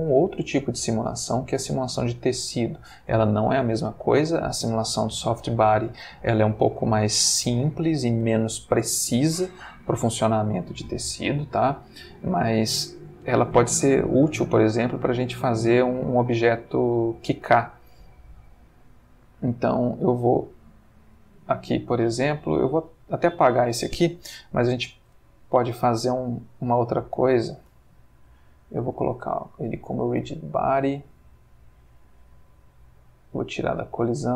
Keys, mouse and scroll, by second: 0.0-0.5 middle drag, 13.2 middle click, 14.7-15.7 middle drag, 18.2-20.8 drag, 22.1 x, 22.5 click, 25.0 shift+a, 27.0 click, 29.2 click, 30.2 click, 33.3 click.